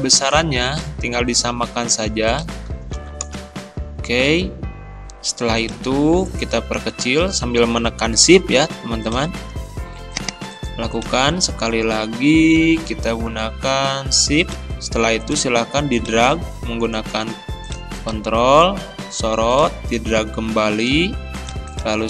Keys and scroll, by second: 3.3 Return.